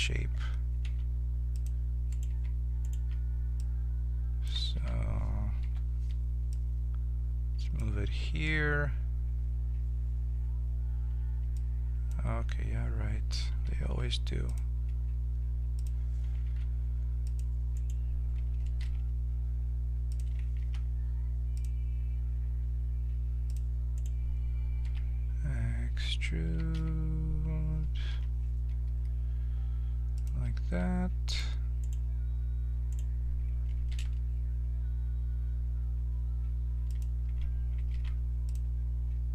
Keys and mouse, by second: 0.8 ctrl+Tab, 2.1-4.7 right drag, 3.6-5.6 drag, 4.7 ctrl+z, 5.6 o, 6.5-8.3 drag, 13.8 ctrl+r, 16.4 ctrl+Tab, 17.7-19.7 right drag, 18.8 e, 20.6 ctrl+t, 20.6 ctrl+r, 23.9-27.5 drag, 24.8 e, 30.6 ctrl+r, 32.9-36.9 drag, 34.0 e, 37.9 ctrl+r.